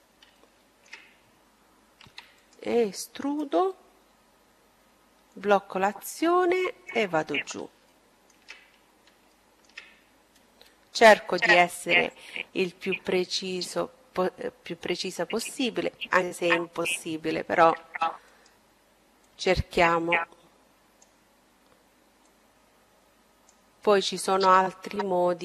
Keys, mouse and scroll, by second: 0.9 e, 2.2-4.1 drag, 6.2 middle click, 9.3-10.9 drag, 16.7 e, 18.2-19.9 drag, 21.1-22.9 drag.